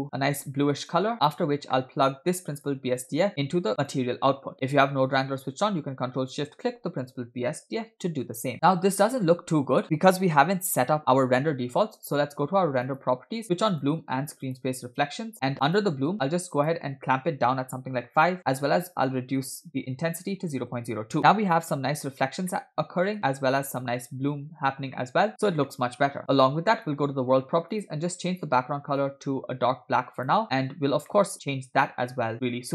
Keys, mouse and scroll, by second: 1.5 scroll down 2, 1.8 middle click, 2.6 click, 3.1 click, 3.3 click, 8.4 ctrl+shift+click, 8.5-9.3 middle drag, 9.4-10.8 scroll up 2, 10.8 scroll down 3, 12.9 click, 13.9 click, 14.6 click, 15.7 click, 16.6-18.0 drag, 18.8-20.8 drag, 22.6-23.2 middle drag, 23.3-23.9 scroll up 2, 24.6-25.1 scroll down 3, 25.0 middle click, 25.8 middle click, 26.8 click, 27.8 click, 30.5-31.1 scroll down 2, 31.1-32.1 middle drag, 32.2-32.6 scroll up 2.